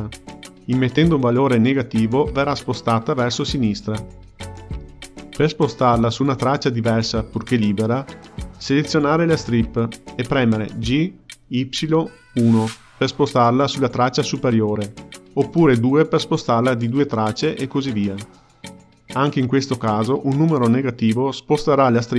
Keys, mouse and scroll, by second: 2.0 click, 2.9 g, 10.5 click, 11.7 g, 14.7 g, 16.5 g, 18.2 click, 18.7 g, 20.0 g, 21.0 g.